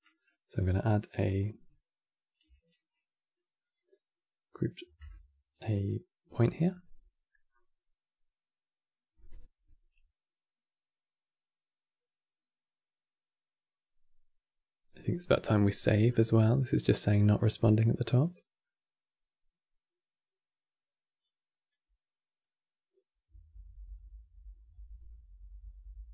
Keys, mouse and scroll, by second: 8.1-26.1 alt+drag.